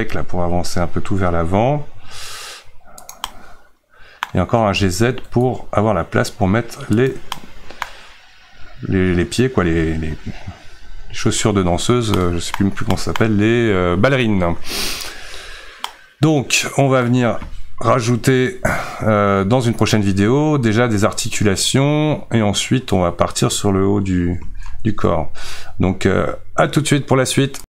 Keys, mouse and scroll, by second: 3.2-4.8 middle drag, 4.8 g, 7.3-11.8 middle drag, 11.8-12.2 scroll down 1, 12.2-15.1 middle drag, 15.1-15.4 scroll up 1, 15.4-15.9 scroll down 1, 15.9-17.8 middle drag, 17.8 Tab, 20.0 click.